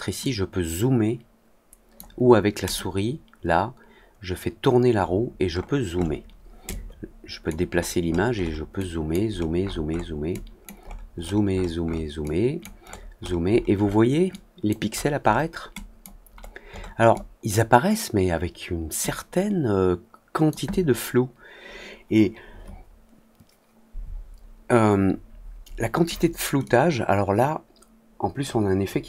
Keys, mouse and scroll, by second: 0.1-1.9 drag, 2.6 click, 4.3 middle click, 4.6 middle click, 5.4 middle click, 5.8 middle click, 6.6 click, 7.6 middle click, 8.0 middle click, 8.3 middle click, 8.7 click, 9.2 middle click, 9.6 middle click, 9.9 middle click, 10.2 click, 10.7-11.9 scroll down 8, 11.9 scroll up 2, 12.2 click, 12.8-13.6 scroll down 6, 13.7 middle click, 14.2 click, 14.8 middle click, 15.2 middle click, 15.7 click, 16.3 middle click, 16.6 middle click, 17.1 click, 18.9-20.4 drag, 26.6-28.3 drag.